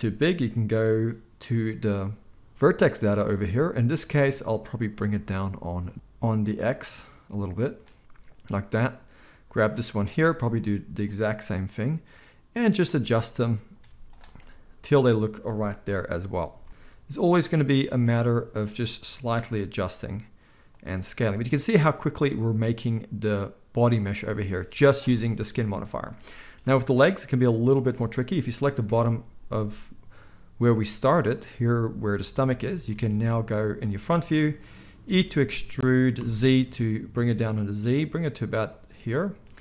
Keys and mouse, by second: 5.9 ctrl+z, 13.8 z, 15.8 KP_1, 16.5 z, 18.1 z, 19.1 ctrl+a, 20.9-27.8 middle drag, 27.8 click, 27.8-39.6 middle drag, 28.8 KP_1, 34.9 e.